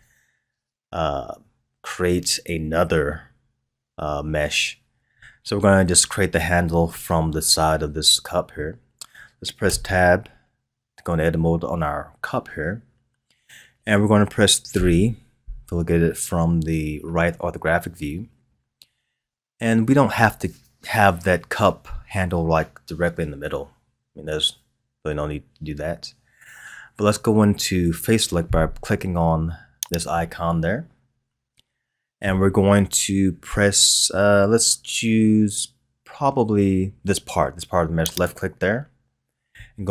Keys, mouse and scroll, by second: 9.7 Tab, 14.7 KP_3, 17.7-20.7 scroll up 1, 29.8 click, 38.1 click.